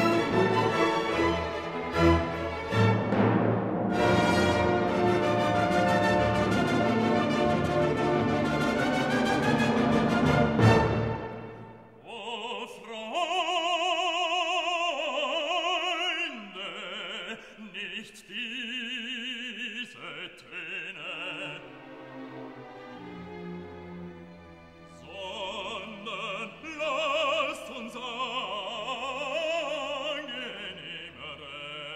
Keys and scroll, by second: 14.3 ctrl+t.